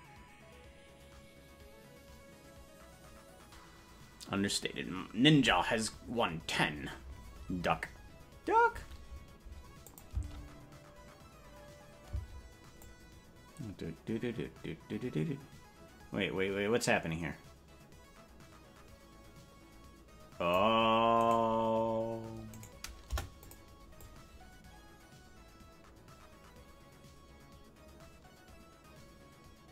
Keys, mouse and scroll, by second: 9.8 click, 12.0 space, 12.7-20.5 drag, 21.3 right click, 23.0 Delete, 23.0 right click, 23.9-29.7 drag.